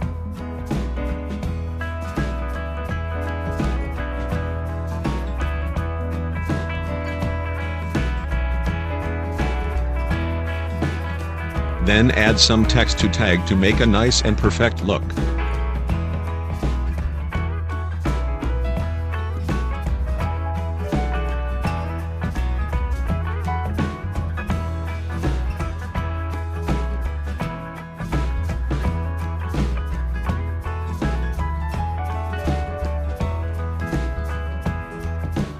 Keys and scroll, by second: 11.8 t, 15.4 ctrl+0, 21.3 shift+m, 21.8 o, 23.2-25.1 typing, 28.3 space, 30.8 ctrl+t.